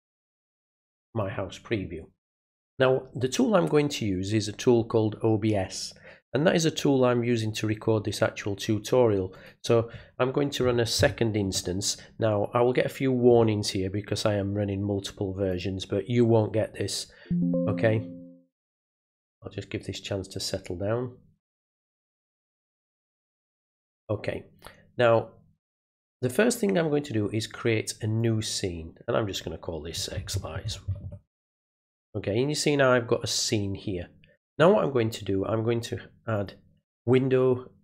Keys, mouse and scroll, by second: 9.3 click, 15.5 click, 23.6 click, 28.2 click, 36.3 click.